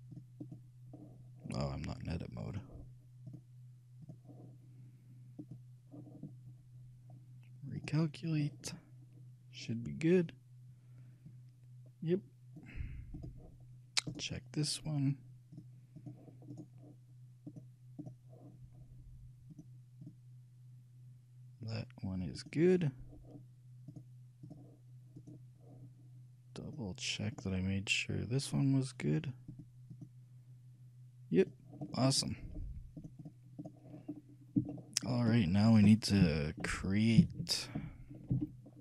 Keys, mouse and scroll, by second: 2.6-5.2 drag, 7.1 click, 7.9-9.7 drag, 11.4-13.2 drag, 13.4-15.2 drag, 14.3-16.2 right drag, 15.8-17.6 drag, 16.7-18.4 right drag, 17.8-19.5 drag, 19.7-22.0 drag, 22.5-26.0 drag, 25.4-27.2 right drag, 26.8-28.5 drag, 29.7-35.0 drag, 32.1 middle click, 34.8-36.8 shift+middle drag, 36.3 shift+KP_3, 36.8 KP_1, 37.4 KP_3, 38.5 t.